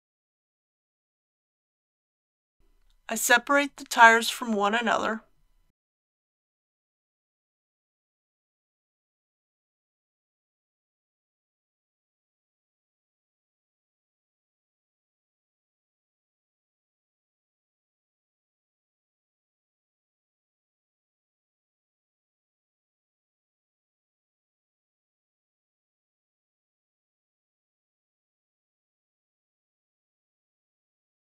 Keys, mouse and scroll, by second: 0.0 alt+a, 2.6 click, 3.8 Tab, 5.4 l, 6.4 p, 7.1 click, 8.1-10.5 middle drag, 11.8 alt+a, 13.0 right click, 14.4 alt+a, 15.3-16.5 middle drag, 17.1 ctrl+a, 18.3 alt+a, 20.3 Tab, 21.3 click, 23.7 Tab, 25.0-25.9 typing, 26.4 click, 27.2 Tab, 28.0 middle click, 29.2 click, 31.2 Tab.